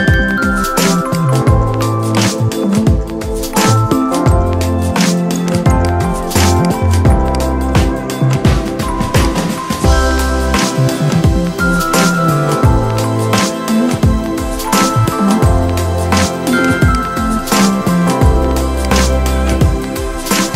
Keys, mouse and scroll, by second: 5.4 click, 8.4 ctrl+x, 9.0 click, 10.0 ctrl+v, 11.4 ctrl+z, 12.3 ctrl+a, 15.2 ctrl+v, 16.8-18.6 shift+drag.